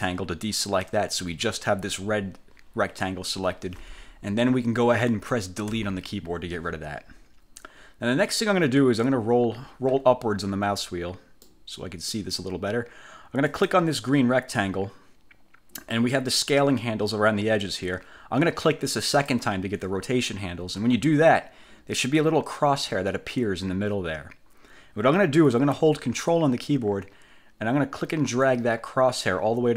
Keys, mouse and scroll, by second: 0.0 shift+click, 5.8 Delete, 7.2 scroll up 2, 7.9 scroll down 2, 9.2-9.6 scroll up 2, 9.7 scroll up 2, 10.1-10.8 scroll down 4, 11.6 click, 13.6 click, 19.3 click, 28.6-29.7 ctrl+drag.